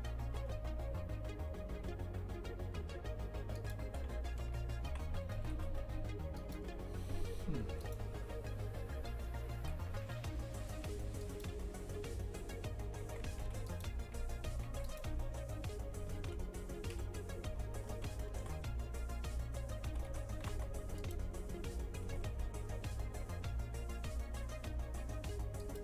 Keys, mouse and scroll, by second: 0.3 g, 4.4 KP_0, 4.9 shift+f, 7.7 3, 7.8 right click, 9.6 e, 13.1 shift+f, 14.1 2, 14.7 1, 14.9 right click, 16.2 ctrl+z, 17.0 KP_3, 17.6 scroll up 2, 18.2-20.0 shift+middle drag, 20.0 g, 22.1 g.